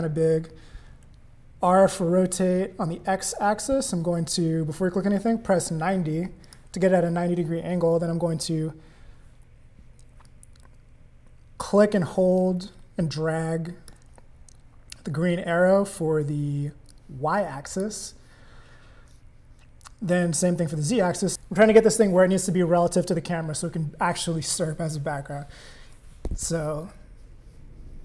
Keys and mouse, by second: 1.6 r, 10.2-13.9 drag, 16.9 click, 26.5-28.0 drag.